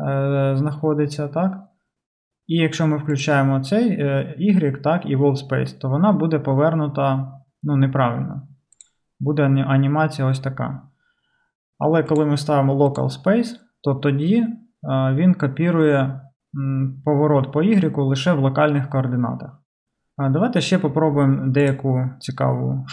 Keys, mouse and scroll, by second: 3.1 click, 3.3-8.7 middle drag, 8.7-22.9 drag.